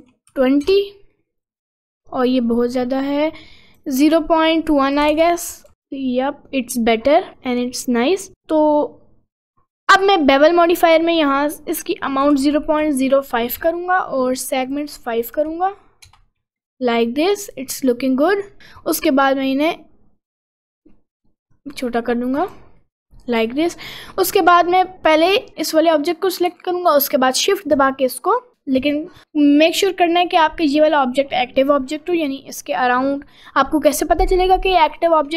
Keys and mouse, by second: 1.2 middle click, 3.2 click, 4.8 click, 6.3 middle click, 7.0 middle click, 7.4 middle click, 11.0-13.6 drag, 14.6-16.2 drag, 16.6-18.5 middle drag, 20.7 click, 21.5 click, 22.5 click, 22.9 middle click, 23.5 middle click.